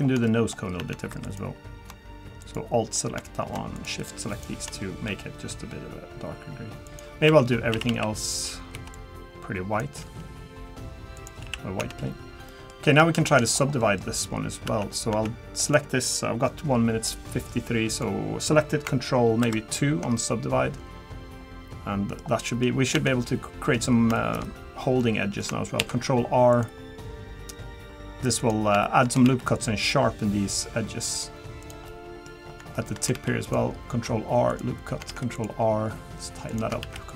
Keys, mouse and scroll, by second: 0.3 shift+middle click, 0.8 Tab, 1.1 3, 1.2 click, 2.4 alt+click, 3.7 shift+click, 4.0 alt+click, 4.3 alt+click, 5.1 g, 7.3 a, 7.7 a, 8.7 b, 10.0 g, 11.4 a, 11.8 Tab, 12.0-12.5 scroll down 2, 12.5 middle click, 12.8-13.1 scroll up 3, 13.1 shift+middle click, 13.5 scroll down 2, 13.7 scroll up 1, 13.8 middle click, 14.3-14.7 scroll up 1, 14.7 Tab, 15.1 Tab, 15.6 click, 17.1 middle click, 17.9 click, 19.5 ctrl+2, 20.2 middle click, 22.4 middle click, 23.0 Tab, 23.3 middle click, 24.1 shift+middle click, 25.0 middle click, 25.8 ctrl+r, 28.8 shift+middle click, 29.2 ctrl+r, 31.9 middle click, 32.5 scroll up 3, 32.7 shift+middle click, 33.1 ctrl+r, 35.1 ctrl+r.